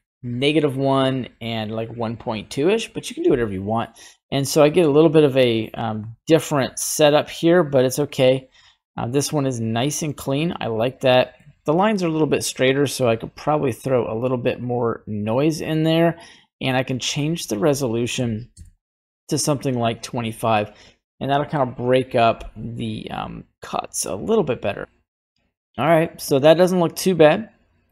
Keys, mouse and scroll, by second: 6.7-8.0 drag, 8.2-10.0 middle drag, 10.6-11.0 scroll down 1, 11.0 middle click, 13.4-15.6 drag, 16.4-18.5 drag, 26.7-27.9 drag.